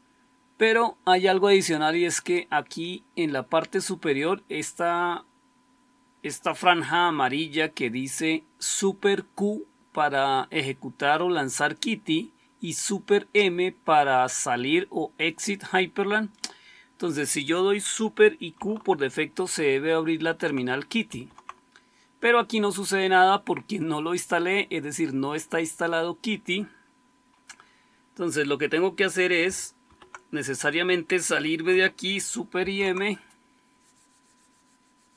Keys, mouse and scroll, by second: 20.9 super+q, 29.7 super+q, 32.5 super+m.